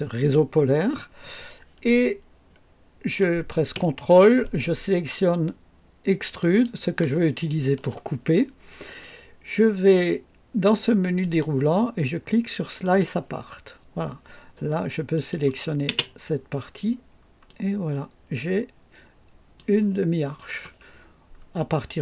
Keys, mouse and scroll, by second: 6.3 ctrl+click, 11.1 click, 12.8 click, 15.1 click, 15.8 space, 16.7 scroll up 1, 17.4-19.7 drag, 20.3 click, 20.9-21.2 scroll down 1, 21.5-22.0 right drag.